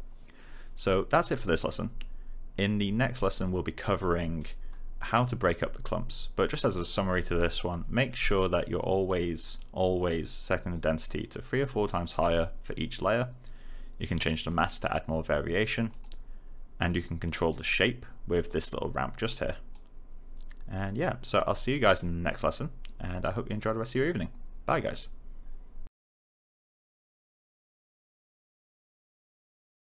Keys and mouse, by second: 9.4 click, 14.1 click, 18.4 click.